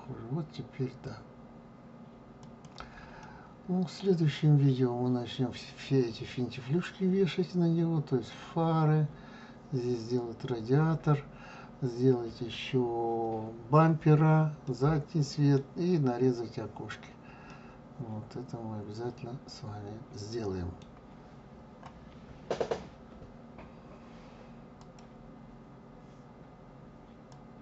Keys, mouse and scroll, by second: 3.2-6.2 middle drag, 14.6-20.5 middle drag.